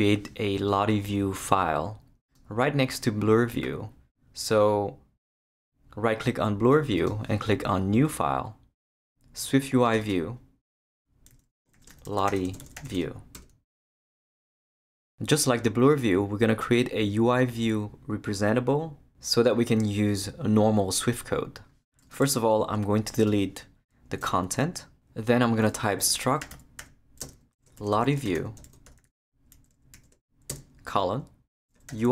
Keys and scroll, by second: 11.5-13.3 typing, 24.2 shift+BackSpace, 25.7-32.1 typing.